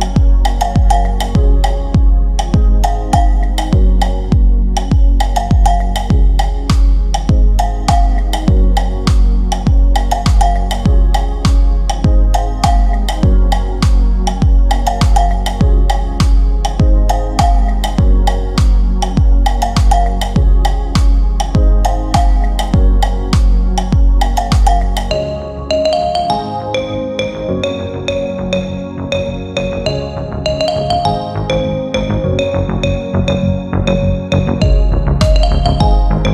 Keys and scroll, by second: 2.3 shift+Page_Up, 11.4 Delete, 32.0 Delete.